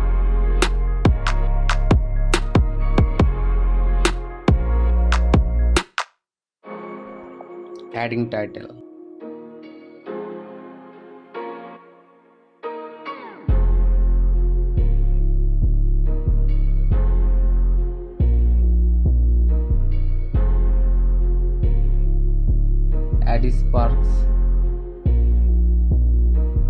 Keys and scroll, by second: 0.0 ctrl+z, 4.0 Return, 6.6 ctrl+t, 10.8 Return, 12.0 space, 13.9 ctrl+t, 14.6 Return, 14.8 Down, 16.0 ctrl+t, 16.8 Return, 17.9 Return, 18.8 ctrl+t, 19.9 Return, 20.7 Return, 20.8 space, 21.7 space, 24.1 Return, 24.4 Up, 26.2 ctrl+m.